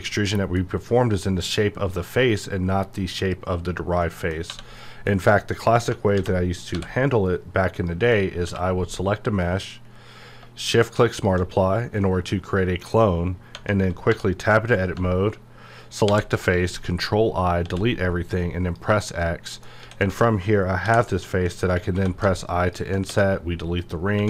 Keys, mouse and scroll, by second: 0.0-4.0 middle drag, 4.0 middle click, 4.5 1, 4.8 middle click, 6.2 alt+v, 6.7 e, 7.6 click, 8.4 q, 10.9 q, 11.1 shift+click, 11.9-13.5 middle drag, 13.5 Tab, 14.4 click, 16.1 ctrl+i, 17.5 x, 18.4 click, 19.2 middle click, 19.7 scroll up 1, 19.8 a, 20.2-20.8 scroll up 1, 20.8 i, 21.6 click, 21.9 3, 22.6 alt+click, 23.0 x, 23.8 click.